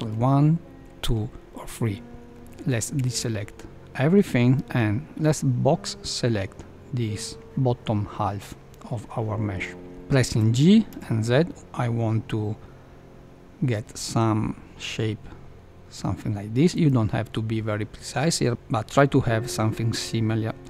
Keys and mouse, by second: 0.0 ctrl+1, 0.7 ctrl+2, 1.7 ctrl+3, 2.3 ctrl+1, 2.9 a, 3.1 a, 5.1 b, 10.2 g.